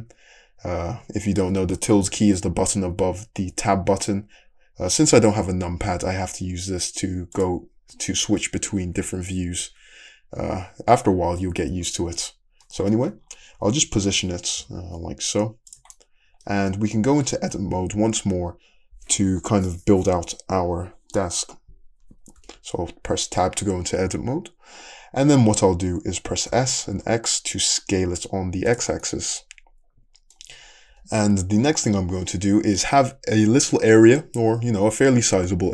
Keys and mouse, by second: 0.0 `, 7.9-8.9 middle drag, 7.9 `, 8.9 `, 9.6 `, 11.9 middle drag, 12.8-13.1 shift+middle drag, 13.5 `, 14.6 g, 15.1 shift+middle click, 16.0-16.5 middle drag, 22.5 Tab, 26.5 s, 28.6-30.9 drag, 30.5 Tab, 30.9 Tab, 30.9-31.9 middle drag.